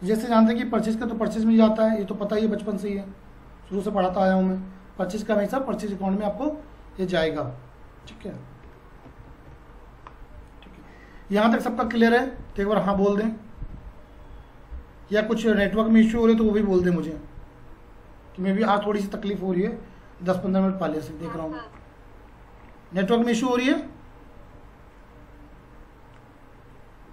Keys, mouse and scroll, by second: 0.9 F4, 2.4-3.0 typing, 4.2 F4, 4.2 typing, 7.9-8.6 typing.